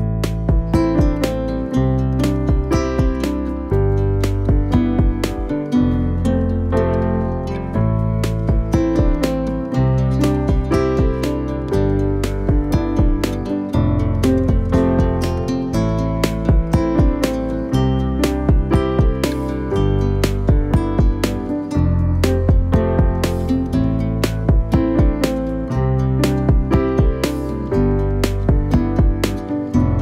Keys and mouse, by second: 0.8-1.8 middle drag, 2.4 KP_3, 3.0 alt+z, 3.4 g, 4.5 shift+middle click, 5.2 alt+right click, 5.7 g, 7.4 alt+right click, 9.6 alt+z, 10.4 middle click, 11.0 KP_1, 11.6 middle click, 12.6 middle click, 13.2 alt+right click, 13.5 g, 15.0 KP_3, 16.2 alt+z, 16.6 c, 18.3 r, 20.3 g, 21.2 e, 21.9 g, 22.9 ctrl+z, 23.4 ctrl+z, 23.9 middle click, 24.6 c, 25.2 KP_3, 25.8 r, 26.4 g, 27.6 e, 28.5 r, 29.7 g.